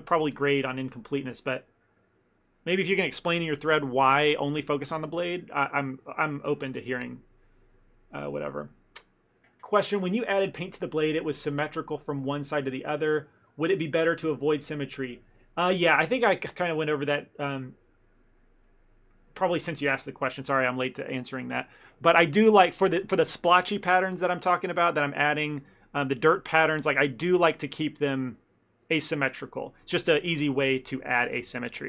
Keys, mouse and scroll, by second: 23.8 middle click, 24.7 shift+middle click, 26.2 middle click, 26.5 middle click, 26.6-27.2 shift+middle click, 26.8 middle click, 26.9 shift+middle click, 27.2 middle click, 30.9 middle click, 31.4 middle click, 31.6 shift+middle click, 31.8 shift+middle click.